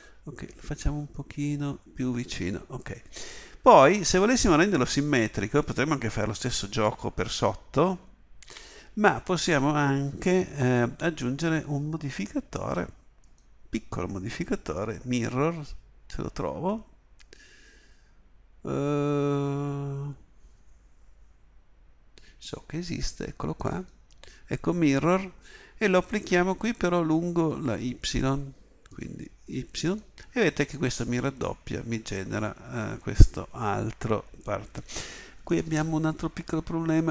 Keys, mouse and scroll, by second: 2.0-5.4 drag, 8.5 z, 31.3-35.4 middle drag, 36.4 KP_7.